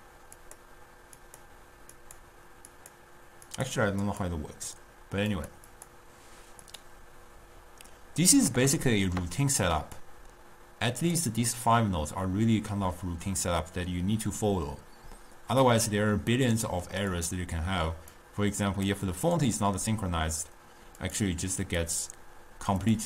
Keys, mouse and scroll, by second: 0.5 click, 1.4 click, 2.1 click, 2.8 click, 3.6 click, 4.1 click, 5.5 click, 5.9 click, 6.8 click, 8.6-10.1 middle drag, 10.1-11.6 drag, 11.6-13.9 middle drag, 13.9-15.8 scroll down 1, 16.5-17.3 middle drag, 17.3 click, 18.2-23.0 drag.